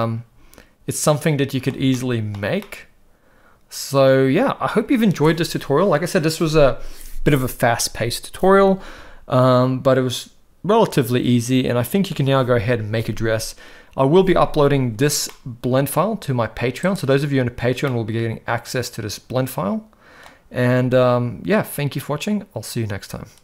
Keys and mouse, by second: 1.9-2.3 shift+middle drag, 2.6-4.7 middle drag, 15.3-15.9 middle drag, 16.8 click, 17.8-20.3 middle drag.